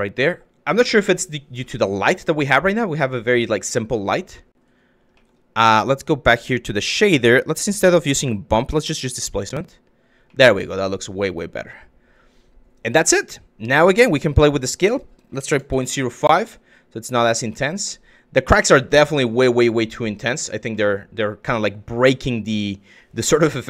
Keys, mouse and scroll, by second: 0.4-1.1 drag, 1.4-2.9 drag, 4.0 click, 4.9 click, 5.9 click, 8.2-9.0 drag, 10.0 drag, 12.8 click, 13.5 click, 14.1-15.8 drag, 17.2 click, 18.3 shift+click, 20.4-20.9 drag.